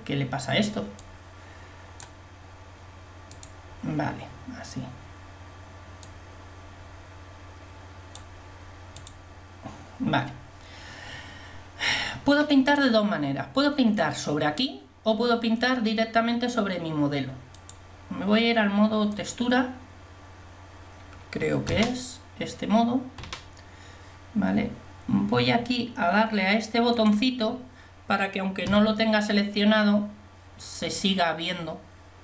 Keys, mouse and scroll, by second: 1.1-5.4 drag, 6.5 click, 7.4 click, 9.2-11.3 drag, 17.5-18.8 drag, 21.8 a, 23.2 a, 27.9 click, 28.7 a.